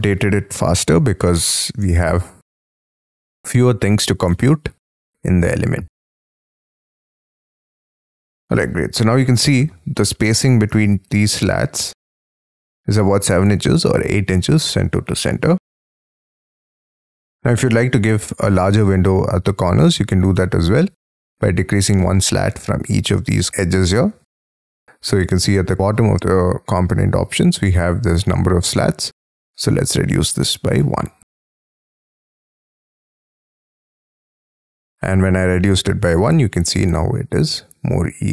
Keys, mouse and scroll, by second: 1.4 middle click, 2.5-3.1 scroll up 11, 3.4 scroll down 6, 4.1 scroll up 3, 4.3 middle click, 4.8 scroll down 5, 6.5 space, 6.9 Escape, 7.6 middle click, 8.2-8.9 scroll down 11, 8.9 middle click, 10.0-10.4 scroll up 11, 10.8 t, 13.1 space, 17.4 double click, 20.0-20.6 scroll up 9, 22.3 scroll down 10, 22.4 scroll up 4, 29.6 1, 36.1 middle click.